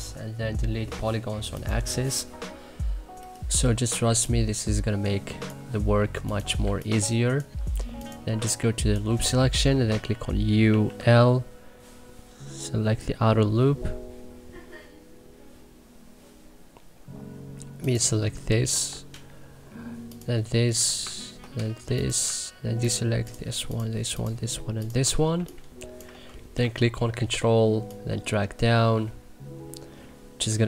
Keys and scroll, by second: 4.1 3, 10.6 u, 10.9 l, 18.7 e, 25.3 3.